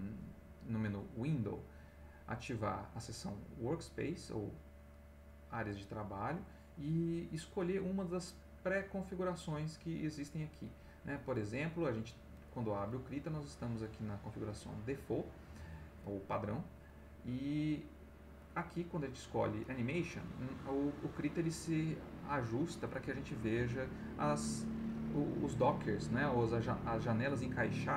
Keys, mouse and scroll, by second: 18.4 click, 27.2 click.